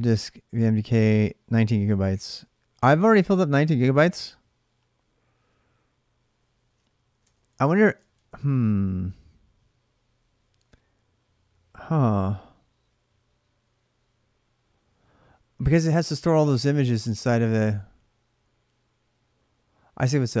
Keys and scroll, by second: 7.0 alt+Tab, 7.8-20.4 alt+Tab.